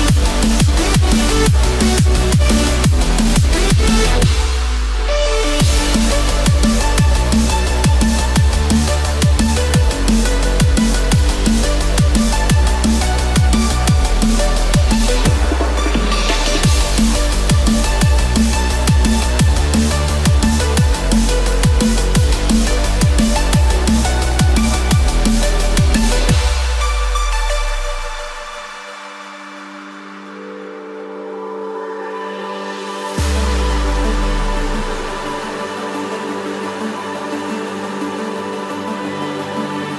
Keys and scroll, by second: 7.1 ctrl+=, 7.2 ctrl+-, 21.3 ctrl+=, 25.6 ctrl+z, 35.3 ctrl+d.